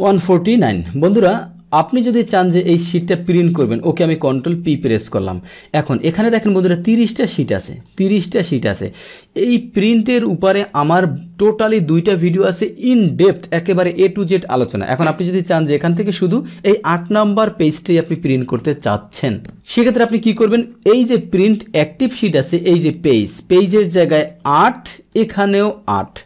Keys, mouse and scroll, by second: 0.3 middle click, 0.9-4.0 middle drag, 4.5 ctrl+p, 6.9 click, 7.3 click, 7.6 click, 8.4 click, 16.8 click, 22.6 click, 25.1 click.